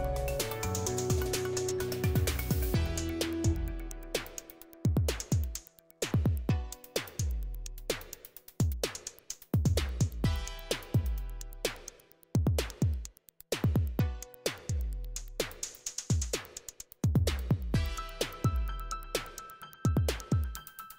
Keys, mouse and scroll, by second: 0.5 click, 1.9 click, 3.5 click, 4.8 click, 7.2 click, 9.3 Return, 12.6 drag, 13.3 click, 17.3 click, 19.7 click, 20.7 click.